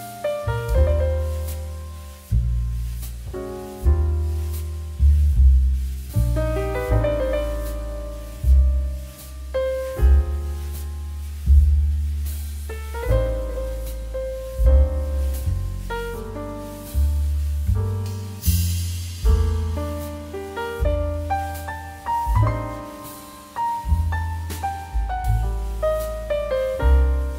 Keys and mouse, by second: 0.7 click, 8.4 6, 9.1 BackSpace, 9.3 7, 10.3 6, 10.8 Return, 11.8 right click, 12.1 click, 21.7 middle click, 22.0 shift+middle click, 22.5 click, 22.8 middle click, 23.1 shift+middle click, 23.6 middle click, 24.0 shift+middle click, 24.4 shift+middle click, 24.9 middle click, 25.2 shift+middle click.